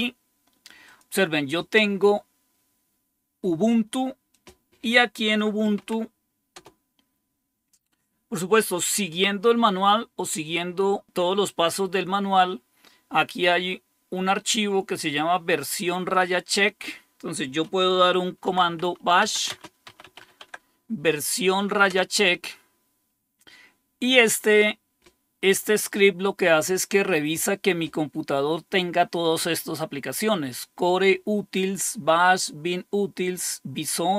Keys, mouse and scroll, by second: 0.8 click, 4.3 click, 5.3-6.7 typing, 6.5 Return, 18.2-20.6 typing, 21.7-22.5 typing.